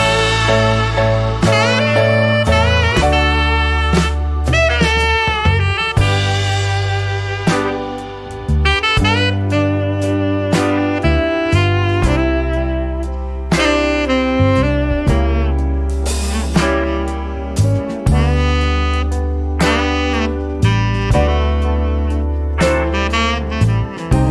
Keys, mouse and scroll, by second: 1.4 click, 2.6 click, 3.8 click, 5.2 click, 5.9 click, 6.4 click, 7.6 click, 8.4 scroll down 2, 9.3-9.7 scroll up 1, 10.0 scroll down 2, 11.6 click, 14.0 click, 16.6 click, 18.9 click, 19.7 click, 20.4 click, 21.7 click, 22.3 click, 23.9 BackSpace.